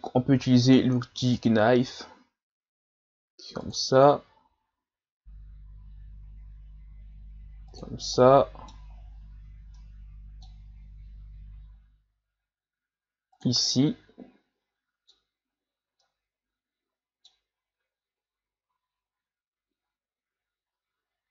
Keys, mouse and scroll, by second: 0.3 k, 8.2 middle click, 9.0-9.8 scroll down 4, 9.8-12.8 middle drag, 13.7-21.3 middle drag.